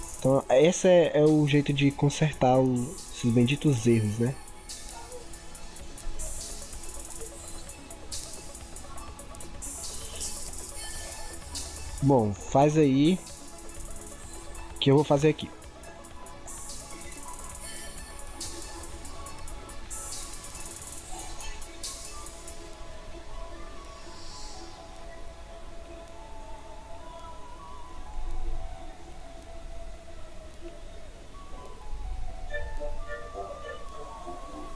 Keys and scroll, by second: 28.6 ctrl+z.